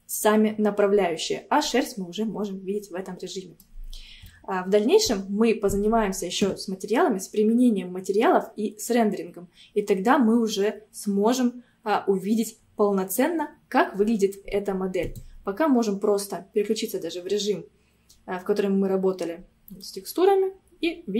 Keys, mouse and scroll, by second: 1.6 scroll up 1, 1.7-4.0 middle drag, 4.0 scroll down 1, 4.3-7.4 shift+middle drag, 17.4 click, 19.9-21.1 middle drag.